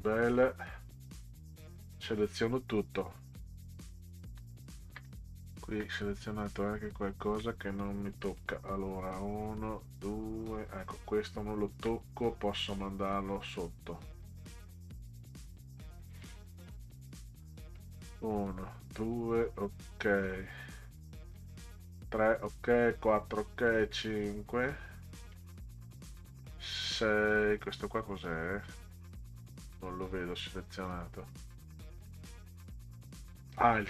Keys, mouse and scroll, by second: 0.4 click, 1.2 shift+click, 7.8-8.2 scroll down 2, 8.3 click, 9.1 click, 11.8-12.1 scroll up 2, 13.6 click, 16.2 click, 17.8 click, 21.4 click, 22.7 click, 23.7 click, 25.3 click.